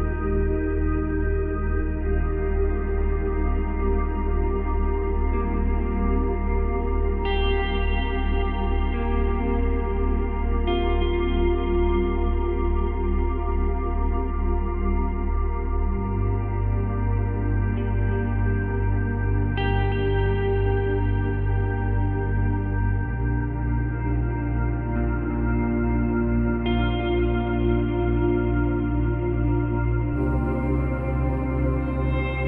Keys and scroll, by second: 23.8 space, 30.3 space.